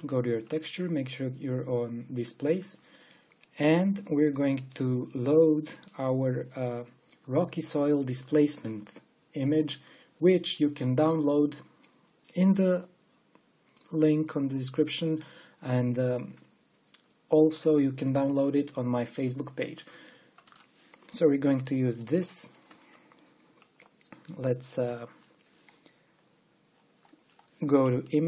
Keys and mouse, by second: 6.3-8.2 drag, 25.0-28.2 middle drag.